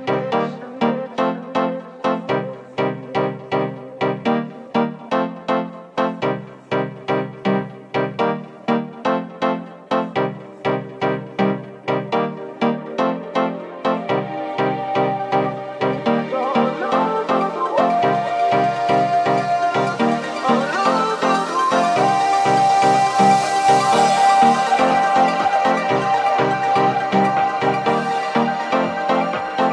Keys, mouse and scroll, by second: 1.6 ctrl+z, 2.6 g, 3.5 s, 4.2-5.5 middle drag, 4.2 g, 5.1 s, 5.5 right click, 5.5 middle click, 6.4 right click, 6.5-14.5 middle drag, 7.5 right click, 7.8 shift+right click, 10.9 s, 14.5 right click, 14.5-16.5 middle drag, 15.9 g, 17.3 middle click, 17.3 g, 18.1-28.2 middle drag, 19.5 right click, 19.8 shift+right click, 20.8 g, 23.5 shift+g, 26.0 g, 28.2 right click, 28.2-29.7 middle drag.